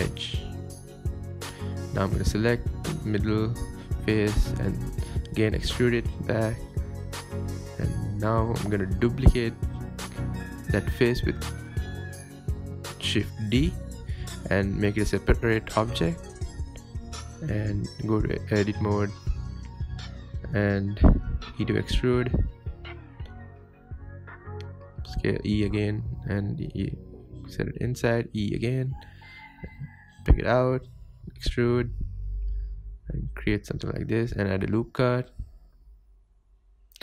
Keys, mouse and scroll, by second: 0.1 ctrl+b, 1.5 Tab, 2.5 Tab, 2.8 scroll up 1, 3.6 3, 3.7 click, 3.8 scroll down 2, 4.7 e, 5.0 s, 6.3 scroll up 2, 6.5-6.9 shift+middle drag, 6.9-8.1 scroll down 1, 8.1 Tab, 8.5 scroll down 1, 8.6-8.9 scroll up 3, 9.0-9.3 shift+middle drag, 9.3 Tab, 9.8-10.8 scroll down 4, 10.0 Tab, 10.8-11.7 middle drag, 11.7 scroll down 1, 12.0-12.7 middle drag, 12.7 scroll up 1, 12.9 Tab, 13.2 click, 13.6-13.9 scroll up 1, 13.9 shift+d, 14.9 p, 15.1 Tab, 15.5 click, 16.0 Tab, 16.1 scroll up 1, 16.3 click, 16.9 e, 17.4 g, 18.2 click, 18.7 g, 19.6 g, 21.1 e, 21.4 s, 22.7 scroll up 1, 22.9-23.3 shift+middle drag, 23.3-23.8 scroll down 1, 23.8 alt+click, 25.0 s, 26.5 e, 26.7 g, 28.1 e, 28.4 s, 29.6 e, 29.8 g, 31.6 s, 32.8 Tab, 33.2 scroll up 2, 33.5 scroll down 1, 33.7 Tab, 34.4 ctrl+r, 36.8 ctrl+r.